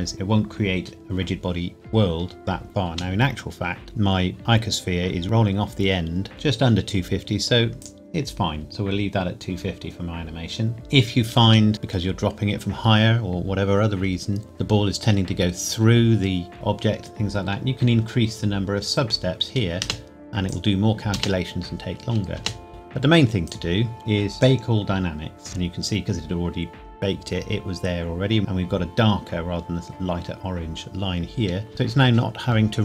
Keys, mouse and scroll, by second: 2.9 space, 3.7-4.1 scroll down 1, 5.2 scroll up 1, 6.3 space, 7.8 click, 11.4 space, 19.8 space, 20.5 click, 21.1 space, 23.5 click, 31.7 space.